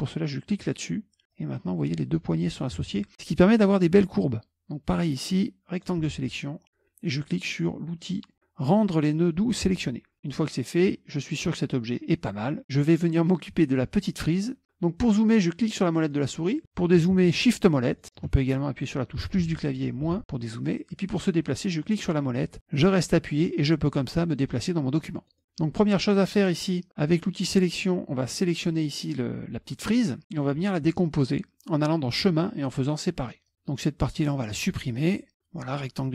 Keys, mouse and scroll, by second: 0.6 click, 1.4-2.7 drag, 2.9 ctrl+z, 5.3 click, 9.7 click, 15.6 middle click, 17.5 shift+middle click, 19.2 KP_Add, 19.4 KP_Add, 19.6 KP_Add, 20.1 KP_Subtract, 20.2 KP_Subtract, 21.9-23.3 middle drag, 24.2 middle click, 24.2-24.7 scroll down 1, 24.7-25.4 scroll up 2, 26.5 click, 27.5 click, 28.7 click, 32.2 click, 33.5-35.0 drag.